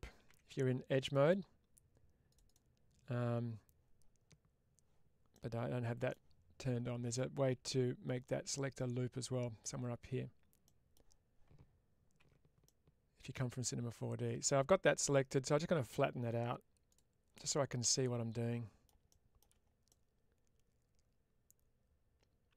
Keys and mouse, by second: 1.0 click, 1.1 click, 2.2-3.3 drag, 5.3-6.0 middle drag, 10.6 middle click, 12.1 3, 12.6-14.8 middle drag, 16.8 click, 17.4-18.7 middle drag, 19.8-22.5 middle drag.